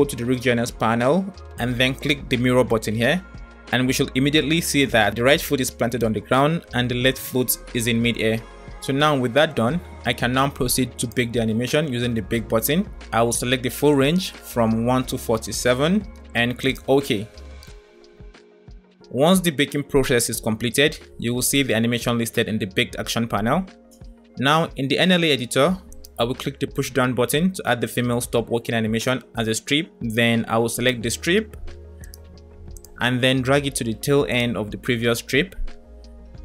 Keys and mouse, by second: 2.1 click, 6.0 click, 6.9-8.7 drag, 11.0-18.8 drag, 25.7 click, 30.8 click.